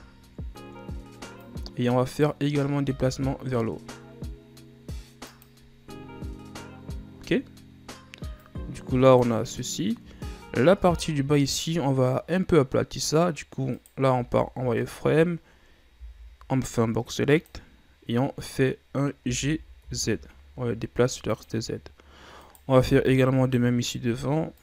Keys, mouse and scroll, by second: 0.2-1.5 ctrl+scroll up 3, 1.5-3.0 drag, 3.0 s, 8.5-10.3 drag, 10.3-11.0 shift+scroll down 1, 11.0 ctrl+Tab, 13.9 right click, 14.3 z, 16.1 b, 19.3 g, 22.6 right click, 22.8 b.